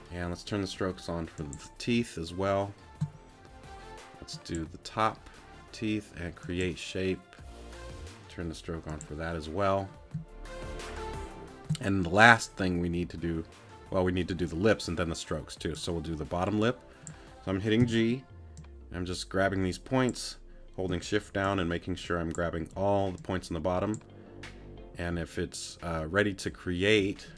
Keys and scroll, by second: 17.8 g.